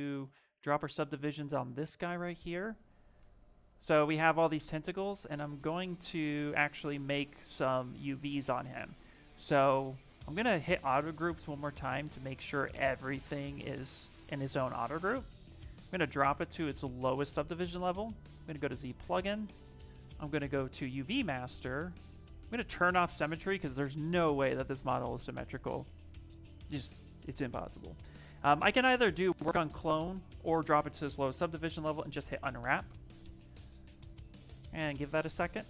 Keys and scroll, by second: 0.3 shift+d, 0.5 shift+d, 1.1 shift+f, 3.0 shift+f, 9.8 2, 11.1 2, 11.5 2.